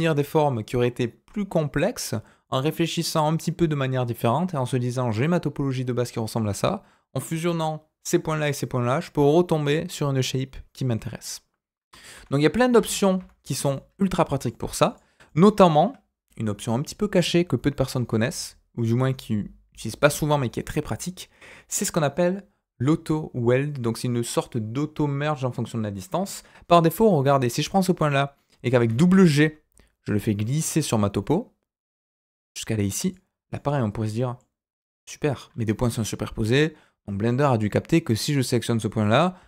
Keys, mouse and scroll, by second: 12.1 ctrl+z, 12.7 ctrl+z, 13.7 middle click, 14.8 click, 15.2 middle click, 17.7 click, 27.2-28.8 scroll up 1, 28.8 g, 33.0 click, 33.5 middle click, 34.4-36.2 scroll up 1, 38.1 click, 39.3 g.